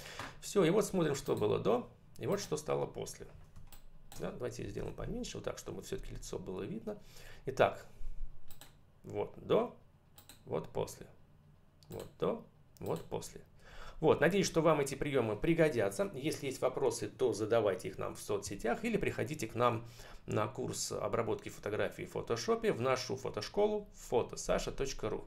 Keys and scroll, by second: 3.3 space, 4.6 ctrl+-.